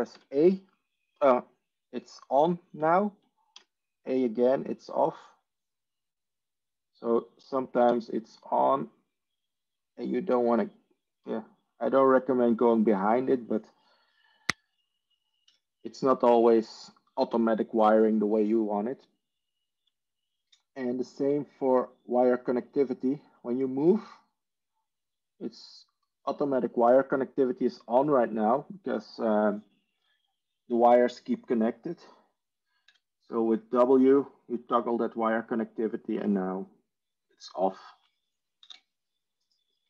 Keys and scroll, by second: 0.1 a, 3.5 a, 15.4 Escape, 20.9 Tab, 21.1 Tab, 33.2 w, 38.7 ctrl+z.